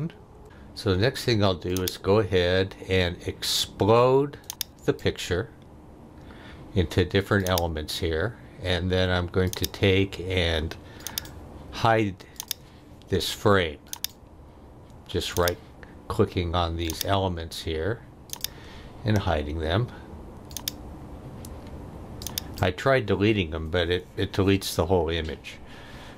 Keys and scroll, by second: 0.3 Delete.